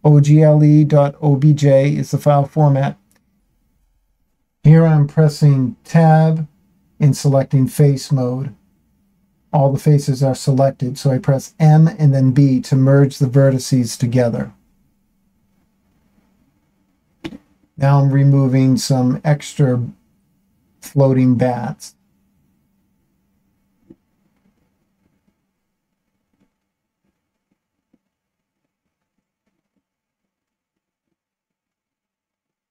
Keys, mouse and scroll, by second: 1.4 middle click, 2.4-3.3 scroll down 2, 3.8 click, 5.4 Tab, 9.5 m, 11.9 shift+middle click, 13.2 middle click, 14.5 click, 15.5-16.6 drag, 18.1 shift+click, 20.5 Delete, 22.6 click, 24.0 shift+click, 25.7 ctrl+l, 27.3 Delete, 29.8-31.6 scroll down 5, 31.9 shift+middle click.